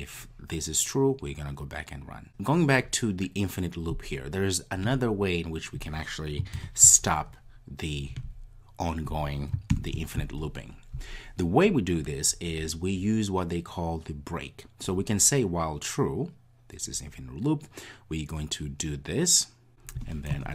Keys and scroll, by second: 6.5 super+/.